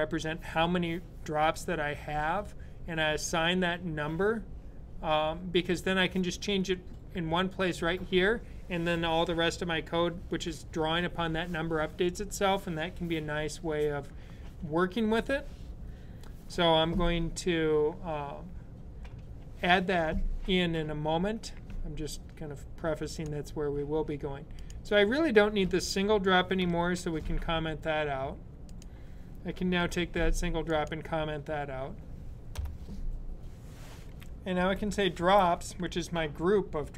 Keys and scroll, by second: 26.6 super+/, 29.5 super+/, 29.6 super+/, 34.2-35.5 typing.